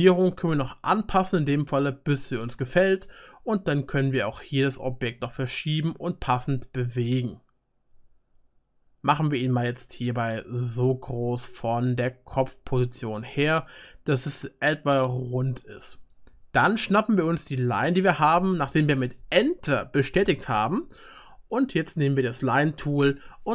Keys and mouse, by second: 0.9-6.9 drag, 0.9-6.9 right drag, 12.3-15.8 drag, 12.3-15.8 middle drag, 12.3-15.8 right drag, 23.0-23.5 drag.